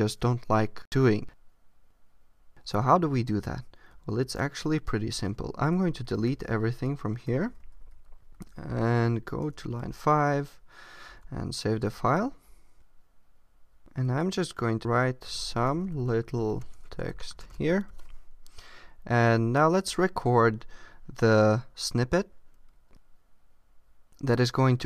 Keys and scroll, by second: 4.2 super+a, 5.6 Return, 8.3 Up, 9.4 Tab, 11.1 super+s.